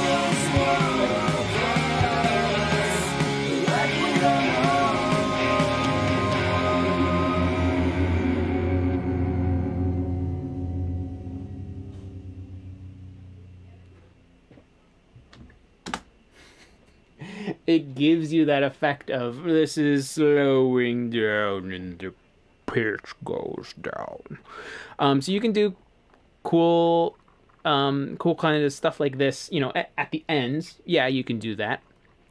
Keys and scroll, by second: 15.9 space, 25.2-25.7 typing, 28.2 typing.